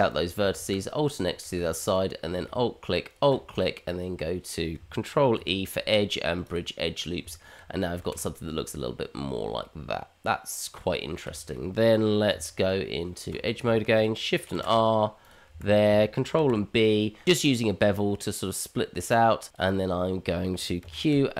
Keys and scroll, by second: 0.6 alt+x, 5.3 ctrl+e, 7.2 Tab, 8.0 shift+z, 12.3 Tab, 14.5 ctrl+r, 16.5 ctrl+b, 20.4 q.